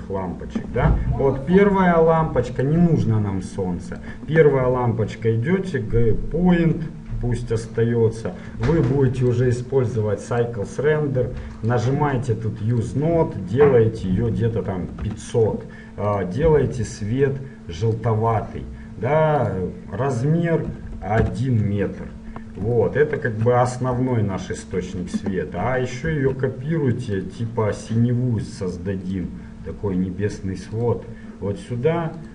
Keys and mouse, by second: 1.9 g, 4.2-6.0 drag, 6.0-9.4 middle drag, 9.4-11.2 drag, 11.8-14.7 drag, 14.7 KP_0, 16.3-18.1 drag, 19.6-21.4 drag, 23.0-26.2 middle drag, 26.2 shift+d, 29.3-31.2 drag.